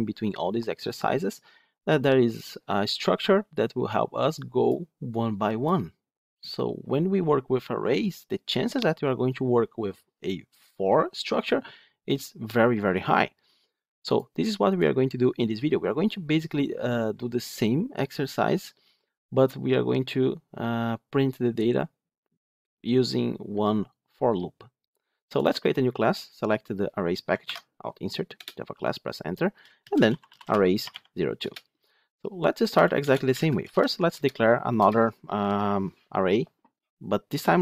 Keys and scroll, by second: 27.4 alt+Insert, 28.2 alt+Insert, 33.8 Tab.